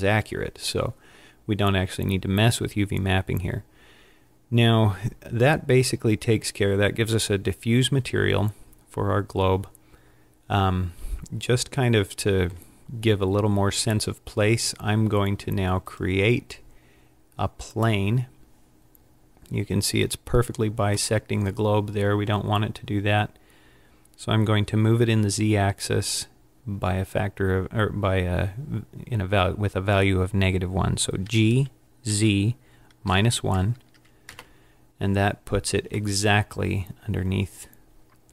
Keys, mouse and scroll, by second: 20.0 click, 21.2 middle click, 31.4 g, 36.2 middle click.